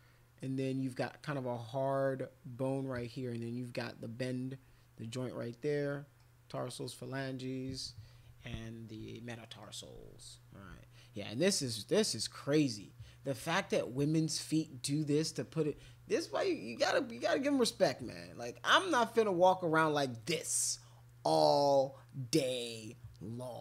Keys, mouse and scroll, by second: 5.9 middle click, 6.5 middle click, 7.2-9.6 middle drag, 12.2 middle click, 13.4 middle click, 18.0 middle click.